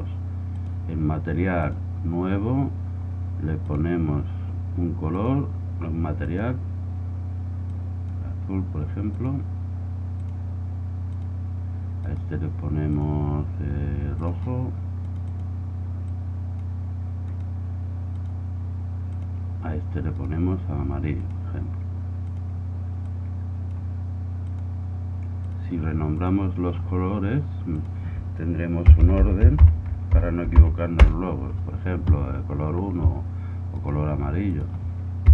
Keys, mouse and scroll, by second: 3.6-7.9 drag, 9.1-10.7 drag, 12.0-13.6 right drag, 12.9 click, 13.6 middle click, 13.9 click, 14.3-16.2 middle drag, 16.2-19.2 drag, 20.1-21.2 right drag, 21.2-22.5 middle drag, 22.5-24.1 drag, 24.4-26.6 drag, 26.6-27.8 middle drag, 27.8-29.5 drag, 33.7-35.3 right drag, 34.6-35.3 drag.